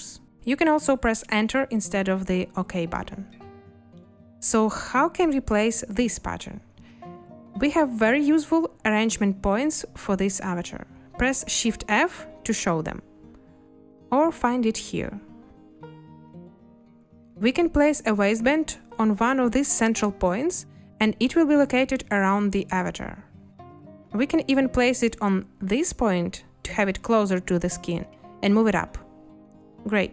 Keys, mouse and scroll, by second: 1.6 Return, 5.1 a, 12.1 shift+f, 20.5 click.